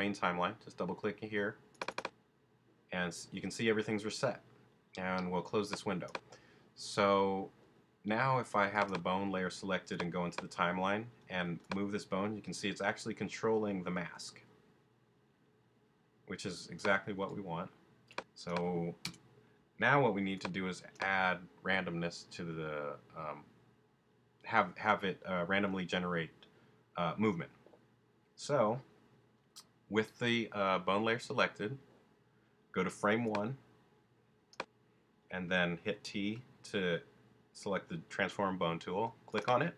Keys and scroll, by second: 11.2 t, 19.0 BackSpace, 35.9 t.